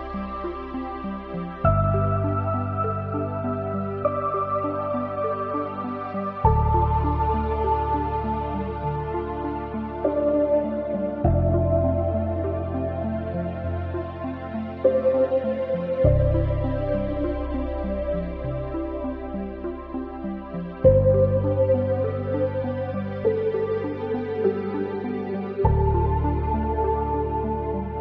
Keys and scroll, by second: 25.3 ctrl+z.